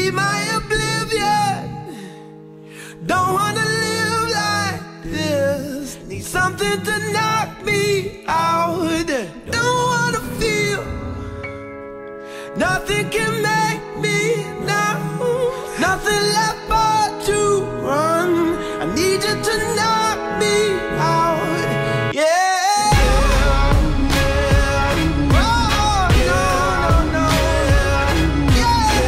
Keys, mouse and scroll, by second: 0.6 click, 2.1-3.6 drag, 5.7 click, 7.9-9.4 drag, 10.1 click, 11.6-13.0 drag, 14.3-16.5 drag, 17.2-18.2 scroll down 1, 17.4 middle click, 19.5-21.1 drag, 23.9 click, 27.2 click, 28.4-28.8 typing, 29.0 click.